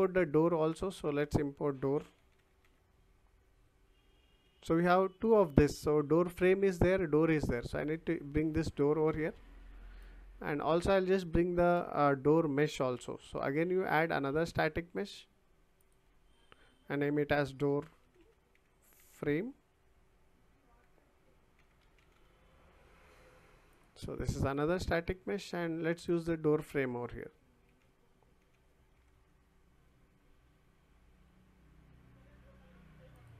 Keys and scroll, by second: 2.2 d, 2.6 r, 17.7-22.6 typing, 28.4 d.